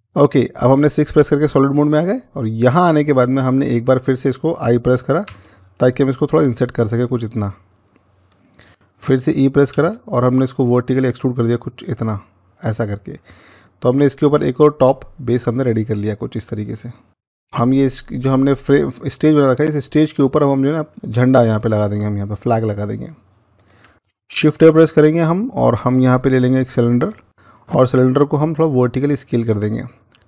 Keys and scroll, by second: 5.2 i, 9.6 e, 24.3 a.